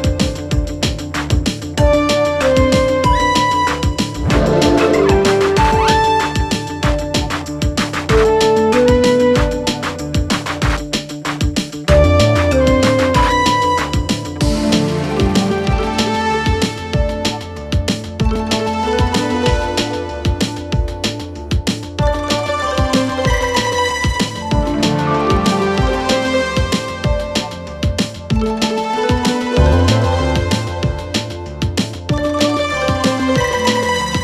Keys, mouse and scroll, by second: 0.8 shift+click, 1.7 right click, 4.6 click, 6.9-11.4 click, 20.6 ctrl+alt+Home, 25.0 s, 26.2-27.7 click, 33.9 Return.